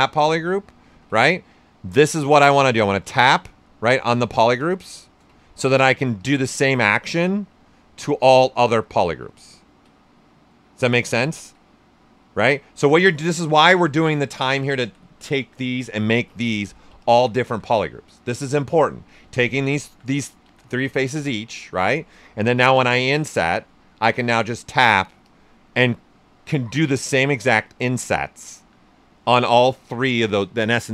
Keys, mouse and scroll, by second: 0.9 ctrl+z, 1.1 right click, 1.9 ctrl+z, 2.2 right click, 2.9 click, 3.9 ctrl+z, 4.8 ctrl+shift+z, 5.6 right click, 6.2 click, 6.2 typing, 6.6 alt+right click, 8.5 ctrl+z, 10.0 right click, 10.9 ctrl+z, 11.6 right click, 12.8-16.0 alt+drag, 16.0 right click, 17.0-18.6 alt+drag, 18.6 right click, 19.3 alt+right click, 19.8-22.4 alt+drag, 22.4 click, 23.7 right click, 24.2 click, 24.6 right click, 25.2 click, 25.7 right click, 28.1 typing.